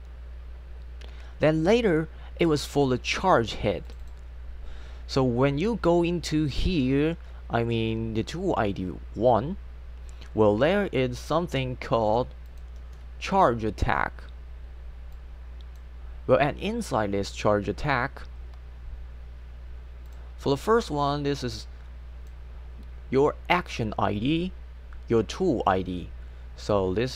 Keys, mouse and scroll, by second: 3.9 click, 4.0 click, 12.5 click, 12.8 space, 15.2 click, 20.1-21.4 drag, 21.5 click.